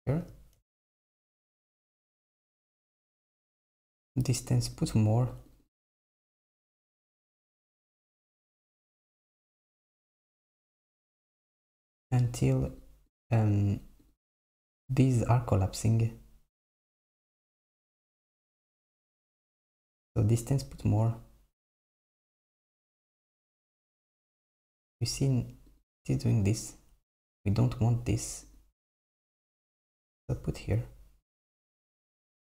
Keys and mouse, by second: 0.2 super+middle click, 3.6-9.1 drag, 10.8-17.6 drag, 20.5-29.6 drag, 31.9-32.5 drag.